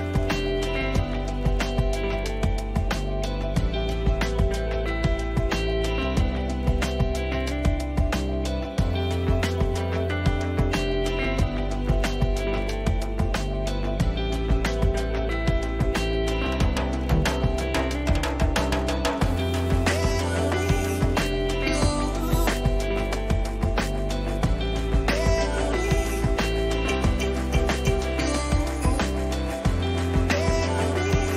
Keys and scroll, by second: 13.6 Return, 15.2 Right, 17.2 Left, 18.8 ctrl+t, 24.7 Return, 25.4 ctrl++, 27.0 ctrl+-, 29.0 ctrl++.